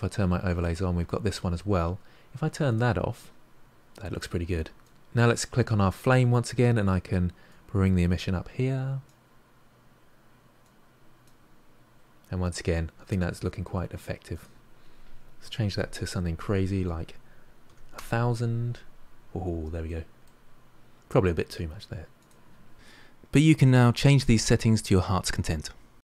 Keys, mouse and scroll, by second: 0.3-2.6 middle drag, 2.6 click, 3.2-3.6 scroll up 3, 3.6-4.8 middle drag, 4.8 click, 7.6-11.9 drag, 11.9-14.3 middle drag, 14.3-15.6 drag, 15.6 0, 15.7 0, 19.8-22.1 middle drag, 22.1 click, 22.7 0.